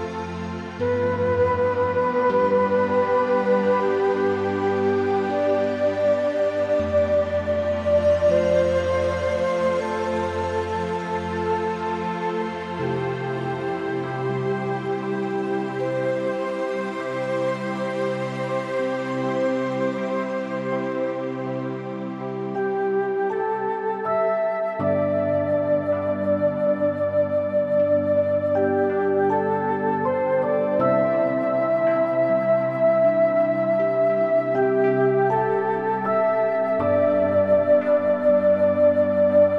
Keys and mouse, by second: 0.9 shift+click, 1.2 shift+click, 1.5 shift+click, 1.9 shift+click, 2.6 shift+click, 3.4 shift+click, 5.7 g, 6.4 z, 10.8-12.0 middle drag, 12.9-13.9 middle drag, 14.2 middle click, 15.3 middle click, 16.5 click, 17.0 shift+click, 17.6 g, 18.0 z, 19.8 Tab, 19.9 click, 20.2 middle click, 21.3 middle click, 22.3 shift+middle click, 22.6 Tab, 23.4 click, 24.0 3, 24.3 click, 24.5 click, 24.9 click, 25.2 click, 26.1 middle click, 27.2 right click, 27.9 middle click, 29.1 Tab, 29.4 click, 29.5 Tab, 30.2 1, 30.7 shift+click, 31.1 shift+click, 31.4 shift+click, 31.8 ctrl+b, 32.1 v, 33.6 click, 34.0 i, 37.3 click, 37.7 shift+click, 38.0 shift+click, 38.9 shift+click.